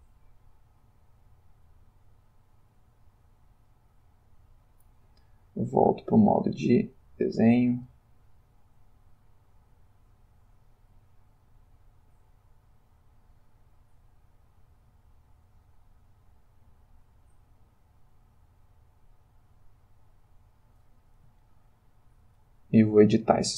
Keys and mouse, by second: 1.7 click, 3.4 middle click, 3.7 click, 4.8 middle click, 6.1 click, 6.5 middle click, 7.1 click, 10.0-13.9 drag, 15.0-17.8 drag, 18.8-20.9 drag, 21.4-23.0 ctrl+middle drag, 23.2 ctrl+middle click.